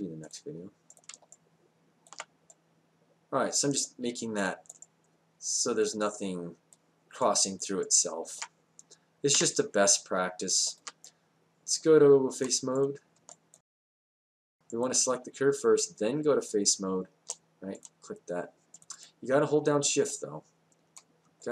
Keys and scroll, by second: 9.4 5.